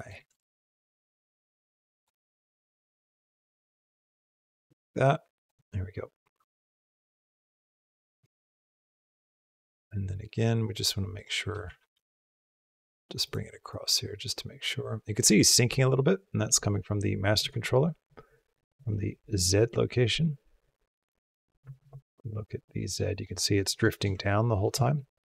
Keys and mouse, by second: 0.1 g, 1.9 r, 3.2 g, 4.7 r, 6.1-9.6 drag, 10.9 click, 11.6 shift+d, 13.6-15.4 drag, 16.3 click, 17.8 click, 18.6 click, 19.8 click, 21.6 ctrl+Tab, 22.4 click, 23.8 shift+click, 24.1 ctrl+click, 24.7 shift+click.